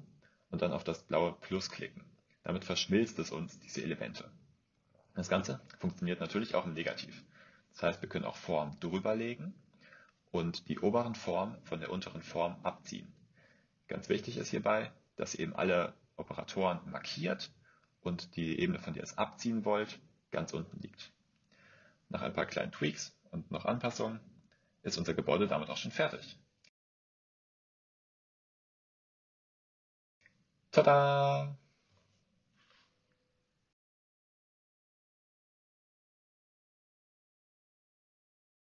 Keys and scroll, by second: 15.1 v, 21.6 a, 23.9 BackSpace.